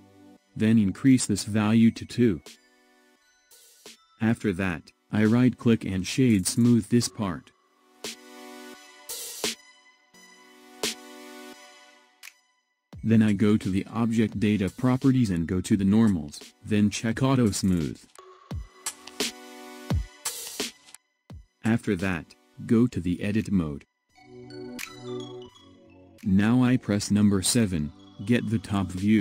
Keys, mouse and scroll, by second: 3.3-5.4 drag, 5.4 Tab, 6.2-7.7 middle drag, 7.7-10.4 right drag, 10.4-13.4 middle drag, 15.2 click, 16.6 click, 18.2-21.3 middle drag, 23.6 Tab, 25.8-28.6 middle drag, 28.6 KP_7.